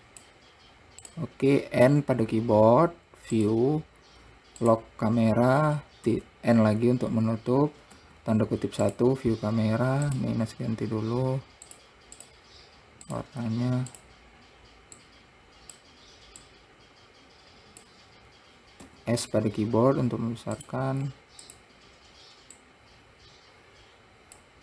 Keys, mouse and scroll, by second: 1.4 click, 2.2 n, 3.7-6.4 drag, 6.4 n, 8.3 `, 10.4 click, 12.1 click, 12.5 click, 13.4 click, 19.2 s, 21.8 click.